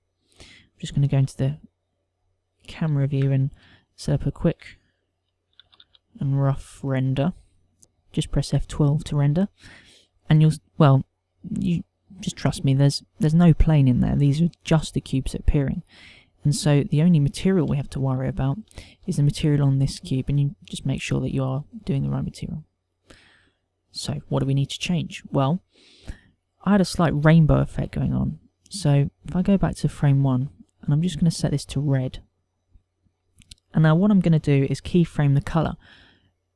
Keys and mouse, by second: 0.8 click, 2.1 g, 3.2 click, 4.6 ctrl+=, 6.4 g, 9.8 F12, 17.7 middle click, 19.1 shift+middle click, 20.6 click, 21.1 shift+middle click, 22.9 click, 23.8 click, 30.2 click, 31.5 click.